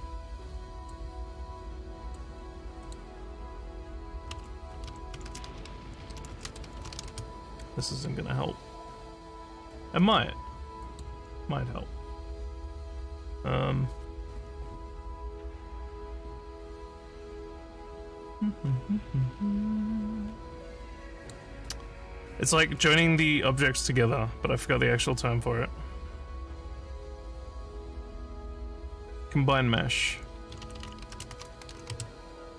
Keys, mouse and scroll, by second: 0.8 click, 2.1 click, 2.8 click, 4.9-7.5 typing, 10.9 click, 15.9 middle click, 16.8 middle click, 17.7 scroll down 3, 18.7 scroll up 1, 18.8 scroll down 1, 20.3 scroll up 2, 21.2 click, 30.4-32.2 typing.